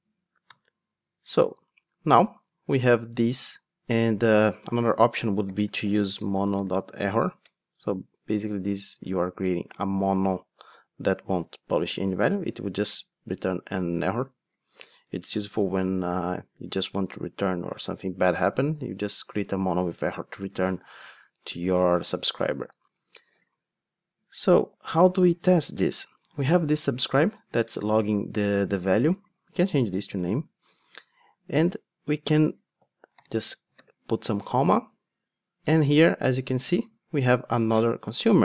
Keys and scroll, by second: 7.4 Return, 12.2 super+b, 36.1 super+p.